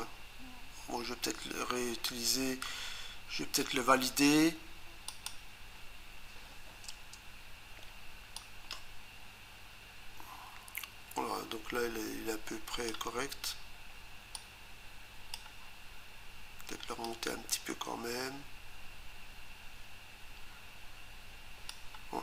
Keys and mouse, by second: 5.1 click, 6.9 Return, 8.4 click, 17.0 click.